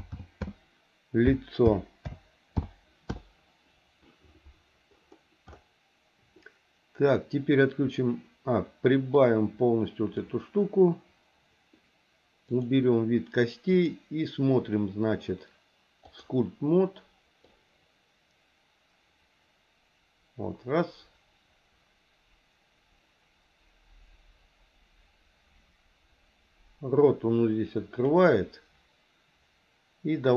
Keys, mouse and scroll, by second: 9.1-10.2 drag, 12.5 click, 13.6-16.4 drag, 17.5-28.2 drag.